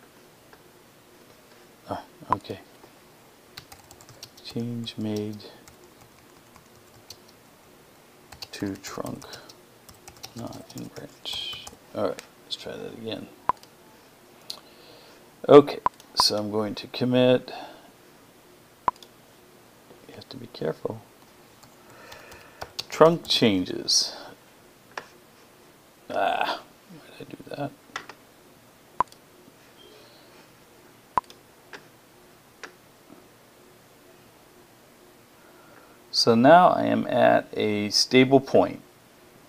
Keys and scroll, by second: 3.1-6.8 typing, 7.9-12.0 typing, 21.2-23.9 typing.